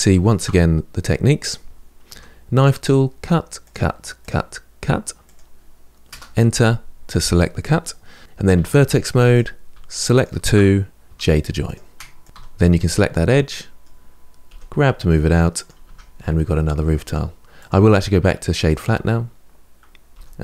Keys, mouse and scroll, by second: 0.5-1.9 scroll up 2, 1.9 k, 8.3 1, 9.1 click, 9.9 shift+click, 10.8 j, 11.4 click, 12.0 shift+click, 12.2 2, 12.5 click, 12.9-14.3 middle drag, 14.3 g, 15.6 Tab, 15.9-16.3 scroll down 1, 16.3-17.4 middle drag, 17.4-19.0 right drag, 19.0-19.8 scroll up 4, 19.8 middle click, 19.9 click.